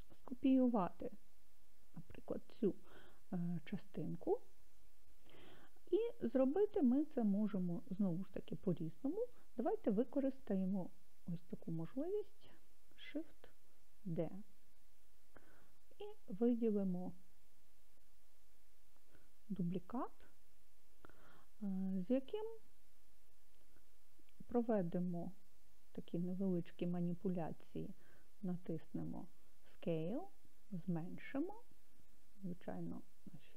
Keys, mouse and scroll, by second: 14.0 shift+d, 20.1 click, 28.5 s.